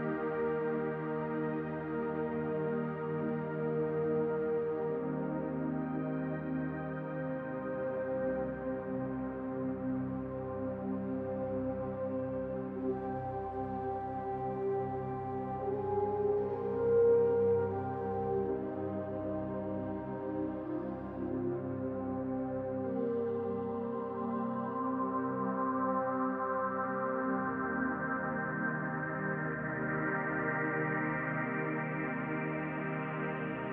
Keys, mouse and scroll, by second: 2.7 click, 5.2 click, 7.5-7.8 scroll up 2, 8.1 scroll up 1, 8.3 shift+middle click, 9.0-9.5 scroll up 1, 10.6 click, 12.5 middle click, 13.3 Tab, 14.1 right click, 15.0-15.8 scroll down 4, 15.5 middle click, 16.5 shift+middle click, 17.1-17.4 scroll down 2, 17.4 middle click, 18.3 scroll up 2, 18.7 middle click, 19.1 Tab, 19.7 middle click, 20.1 click, 21.2 middle click, 22.9 scroll up 2, 23.7 shift+middle click, 24.1 middle click, 25.7 shift+middle click, 26.2-26.7 scroll up 1, 27.5 ctrl+r.